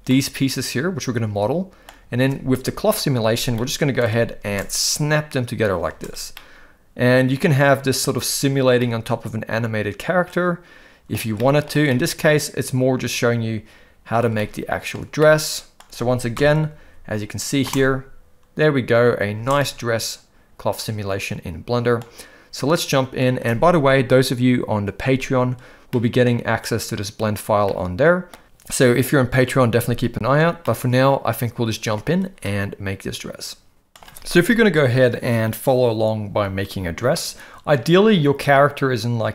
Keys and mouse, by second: 0.1-1.8 middle drag, 3.6-4.0 middle drag, 4.5 space, 5.9 space, 6.3-8.1 middle drag, 8.8-11.1 middle drag, 11.3-11.7 shift+middle drag, 11.9-14.1 middle drag, 14.3-14.9 shift+middle drag, 15.2-15.7 middle drag, 16.4 shift+Left, 17.7 space, 19.5-22.0 middle drag, 19.5 space, 22.8 middle click, 25.9-26.2 middle drag, 27.7-28.3 middle drag, 30.6-31.9 middle drag, 32.4-33.9 middle drag, 34.0 alt+a, 34.0 shift+Left, 37.1-37.7 middle drag.